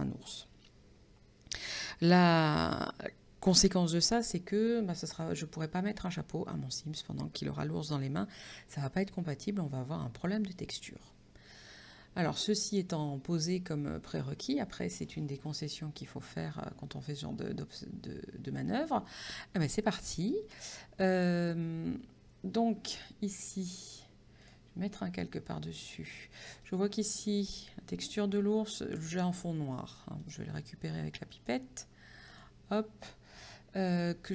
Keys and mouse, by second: 24.5 click, 26.7 click, 30.3 click, 31.4 click.